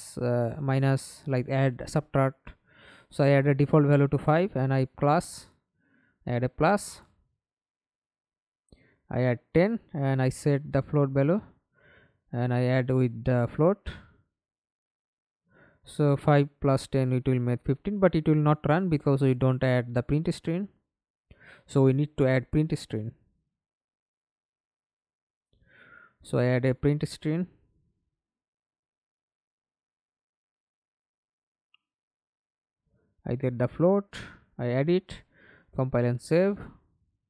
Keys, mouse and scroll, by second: 0.9 5, 3.6 Return, 5.5-6.4 typing, 8.0 double click, 15.9 double click, 16.3 double click, 16.7 middle click, 17.3 F11, 17.8 alt+p, 20.9 Escape, 21.5 F11, 23.7 right click, 25.2-26.6 typing, 26.7 Return, 30.5 double click, 34.1 double click, 34.5 double click, 34.8 middle click, 35.5 F11, 36.0 alt+p.